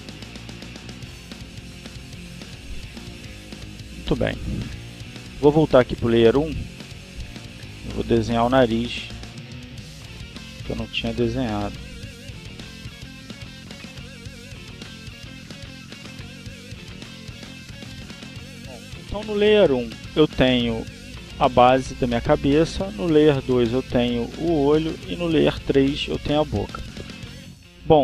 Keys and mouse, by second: 1.5-3.7 drag, 5.8 click, 7.9 click, 9.3 click, 10.1 click, 11.2-13.0 drag, 13.2 click, 14.4 click, 14.7-16.8 drag, 23.5 click, 25.2 click.